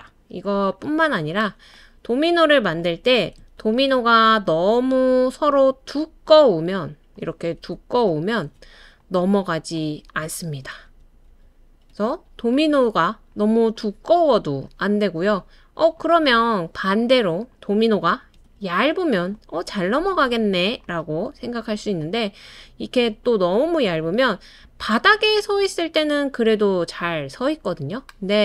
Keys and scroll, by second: 0.0 BackSpace, 3.6 super+c, 3.9 super+v, 8.4 super+d, 10.4 super+d, 10.8 super+d, 11.3 super+d, 18.1 super+c, 18.3 super+v.